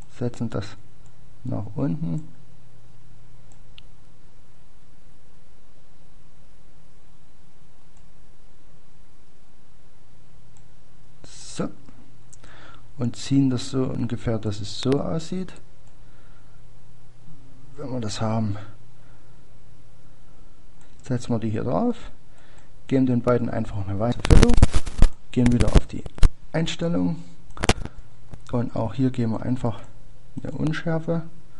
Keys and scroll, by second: 9.5 ctrl+d.